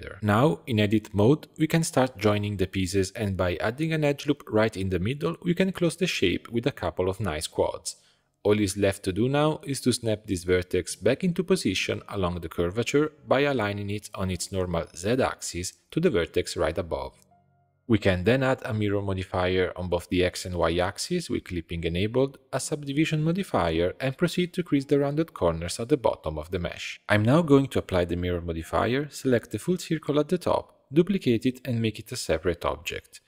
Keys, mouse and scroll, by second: 0.0-0.3 middle drag, 0.3 Tab, 0.5 shift+middle click, 0.8 scroll up 1, 1.1 2, 1.3 click, 1.7 shift+click, 2.1-3.8 typing, 2.4 click, 3.0 middle click, 3.2 ctrl+r, 4.3 click, 4.7 shift+click, 5.2 shift+click, 5.5 shift+click, 6.0 f, 6.4 click, 6.8 shift+click, 7.2 shift+click, 7.7 shift+click, 8.0 f, 8.5 1, 8.7 click, 9.1 middle click, 10.0-11.4 scroll up 2, 11.4-14.4 drag, 15.0 g, 16.6 Tab, 17.1 right click, 17.8-19.7 drag, 20.2 click, 20.8-21.2 scroll down 3, 21.2-23.4 middle drag, 23.4-25.7 drag, 27.0 ctrl+a, 27.6 Tab, 27.9 2, 28.3 alt+click, 29.3 shift+d, 30.3 p, 31.1 Tab, 31.3 click, 32.3 click.